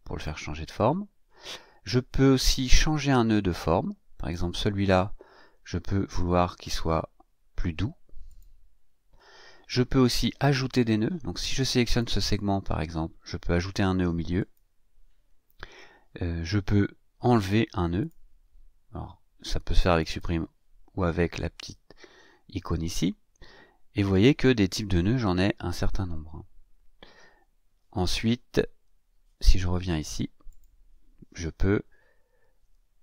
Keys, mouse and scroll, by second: 4.1 click, 8.2 click, 11.8 click, 14.4 click, 18.0 click, 20.0 click, 30.5 click, 32.1-32.5 ctrl+scroll down 2.